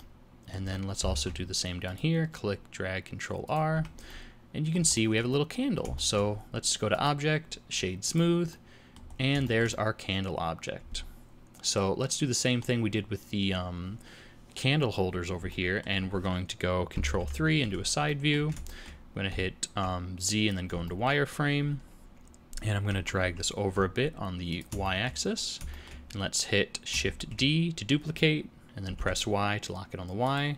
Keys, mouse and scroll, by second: 0.0 middle click, 0.6 Tab, 1.2 ctrl+r, 3.7 Tab, 4.1 middle click, 4.9 shift+middle click, 5.3 middle click, 6.0 shift+middle click, 6.9 click, 8.5 middle click, 9.1 scroll down 4, 9.4 shift+middle click, 9.7 middle click, 15.5 middle click, 17.2 ctrl+KP_3, 18.1 shift+middle click, 18.8 shift+middle click, 19.3 z, 20.9 shift+middle click, 22.9 g, 24.9 shift+middle click, 25.3 scroll up 1, 25.7 shift+middle click, 27.2 shift+d.